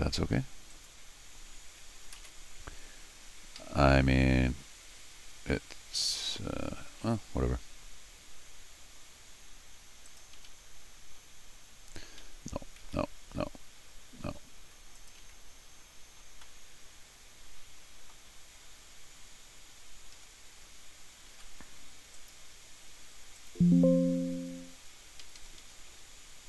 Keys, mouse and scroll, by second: 0.7 click, 3.6 Escape, 10.1 click, 12.8 ctrl+z, 14.2 Escape, 15.0 click, 15.2 g, 16.4-18.1 middle drag, 19.6 scroll down 2, 20.2 Escape, 21.3 d, 22.1 click, 23.4 click, 25.2 Escape, 25.4 Escape, 25.6 Escape.